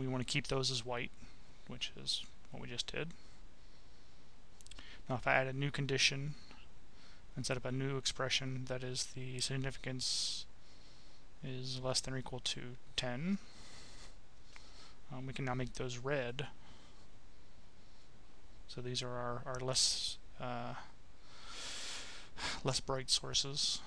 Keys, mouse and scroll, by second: 0.1 click, 1.3-3.5 right drag, 3.9 click, 4.9 click, 6.1 click, 7.3-8.3 drag, 8.9 click, 10.1 click, 10.9 click, 11.3-13.8 typing, 14.9 click, 16.7 click, 18.9 click, 22.9 click.